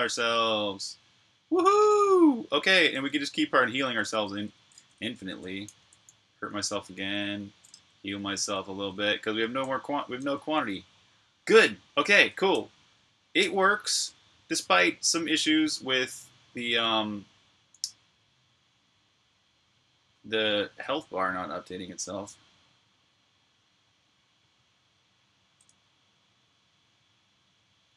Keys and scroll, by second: 0.0-2.9 typing, 3.9-4.5 typing, 6.8-9.0 typing, 10.2 super+q.